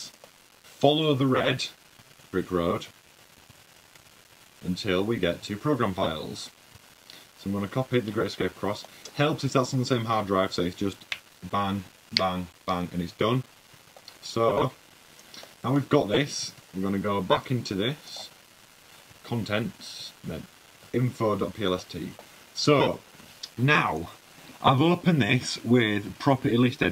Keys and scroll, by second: 3.3 fn+Down, 3.9 Down, 4.1 Down, 4.3 Down, 4.4 Right, 4.6 Right, 5.3 Down, 6.1 Down, 17.7 super+`, 19.6 super+`, 20.2 fn+Down, 21.0 Down, 22.1 super+fn+Down, 23.2 w.